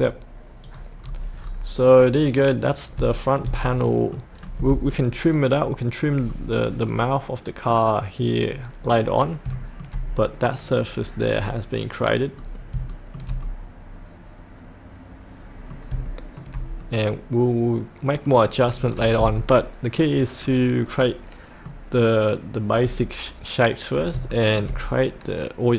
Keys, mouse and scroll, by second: 1.0-1.8 scroll up 1, 1.8 click, 2.3 middle click, 3.1-4.9 shift+middle drag, 6.2-6.8 scroll down 1, 6.8-8.0 middle drag, 8.8 scroll up 1, 11.0 scroll up 1, 11.4 middle click, 12.3-12.7 scroll down 1, 12.9 shift+middle click, 13.4-15.9 middle drag, 16.0 shift+middle click, 16.8-19.2 middle drag, 20.4-21.0 scroll up 1, 21.0 middle click, 21.9-24.1 scroll down 1, 24.3 shift+middle click.